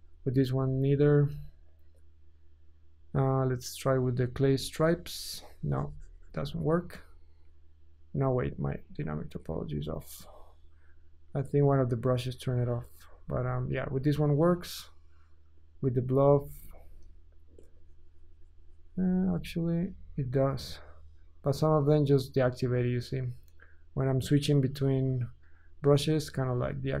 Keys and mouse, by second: 5.5-12.1 drag, 19.3 Tab, 20.1 Tab.